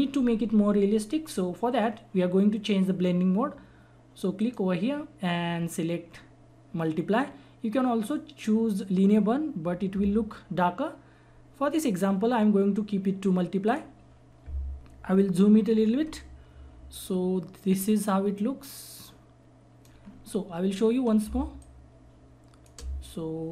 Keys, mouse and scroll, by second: 4.4 click, 13.6 click, 16.0 ctrl+=, 19.0 click, 20.0-21.2 scroll up 1, 21.2 space, 21.6 click, 21.6 click, 21.8 space.